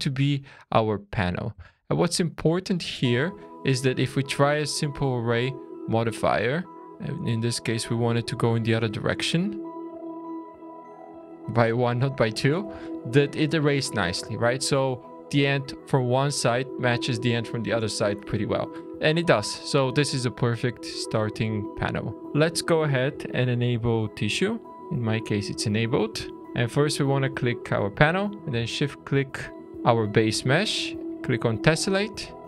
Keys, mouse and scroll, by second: 0.2 scroll up 2, 0.9 middle click, 1.7 shift+middle click, 3.2 Tab, 4.3 click, 5.1 shift+middle click, 6.9 click, 10.9 click, 12.3 scroll down 3, 12.8 shift+middle click, 14.3 scroll up 3, 16.1 click, 19.0-19.6 scroll down 3, 19.6 middle click, 20.6-20.9 scroll down 2, 24.9 click, 26.4 middle click, 26.4-27.9 scroll up 4, 29.6 shift+click, 29.8-31.1 scroll down 2, 31.6 click.